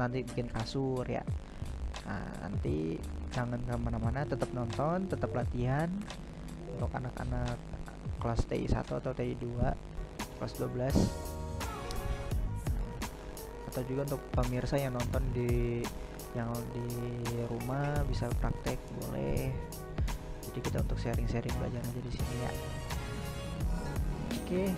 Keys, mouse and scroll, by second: 0.0-0.6 right drag, 0.9 right click, 1.6 right drag, 2.0 right drag, 2.4-3.3 right drag, 3.8 right click, 4.4-5.7 right drag, 6.0 right click, 6.9 right click, 7.2 right click, 8.0-8.5 right drag, 8.7 right click, 9.6-10.2 middle drag, 10.2-11.1 right drag, 11.1-11.7 middle drag, 11.7-12.7 right drag, 12.7-13.2 middle drag, 13.6-14.3 right drag, 14.6-15.0 right drag, 15.0-16.4 middle drag, 16.4 right click, 16.8-17.1 right drag, 17.1-17.7 middle drag, 17.7-18.1 right drag, 18.4-23.9 middle drag.